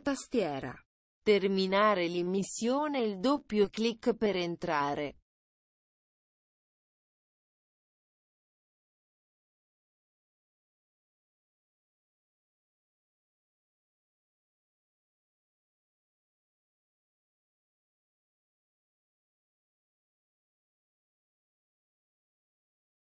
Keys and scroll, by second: 18.7 ctrl+v.